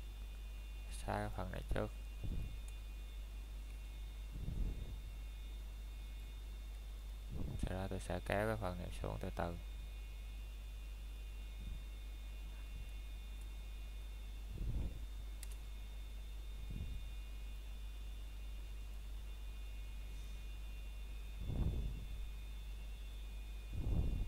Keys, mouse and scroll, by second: 0.6 x, 2.5 click, 3.5 scroll down 1, 4.1 click, 6.6 scroll down 1, 6.9 middle click, 7.8 scroll down 1, 8.1 shift+middle click, 8.9 scroll up 1, 11.6 click, 13.7 alt+click, 15.3 scroll down 1, 15.6 middle click, 17.0 scroll down 1, 17.3 middle click, 17.7 scroll up 1, 17.7 typing, 18.3 middle click, 19.8-20.5 scroll up 1, 20.5 middle click.